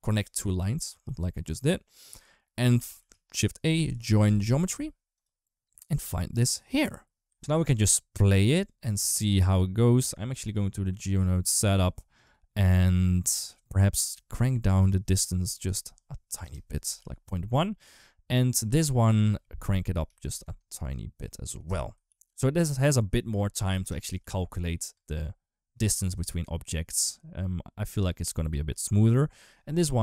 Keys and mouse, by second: 0.1 shift+right click, 0.9 ctrl+z, 1.8 click, 2.8 shift+a, 6.0 click, 7.2 space, 8.6 click, 13.0 click, 14.6-16.2 drag, 16.8 ctrl+s, 18.8-21.5 drag, 19.9 Left, 21.9 ctrl+s, 22.6-23.6 drag, 24.0 ctrl+s, 24.7 space, 28.3 space, 29.2 click.